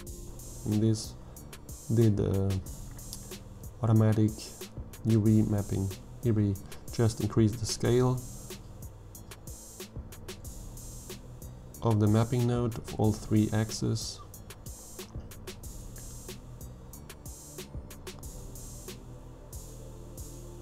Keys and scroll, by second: 5.3 1, 5.6 ., 5.8 5, 6.2 Return, 11.5 2, 11.7 Return, 17.8 Tab, 18.5 alt+a.